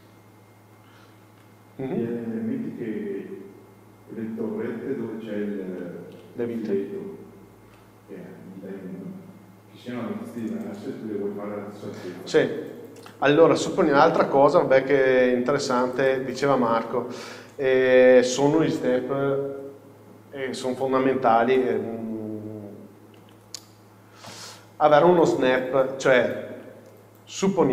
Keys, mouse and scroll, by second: 13.1 KP_1, 16.0 click, 17.2-21.1 scroll up 1, 24.4 KP_4, 25.5-26.1 scroll up 1, 26.1 shift+middle click, 27.6 scroll down 1.